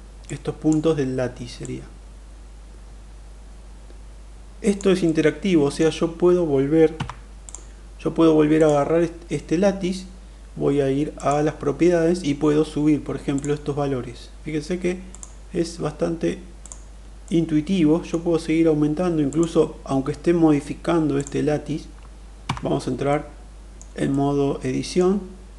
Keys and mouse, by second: 0.2 click, 1.4-4.7 drag, 4.9 middle click, 6.8 Tab, 8.3 click, 11.1 click, 13.3 click, 14.9 click, 16.4 click, 17.0-18.0 middle drag, 19.1 click, 22.2 Tab, 23.0 middle click, 24.0 middle click.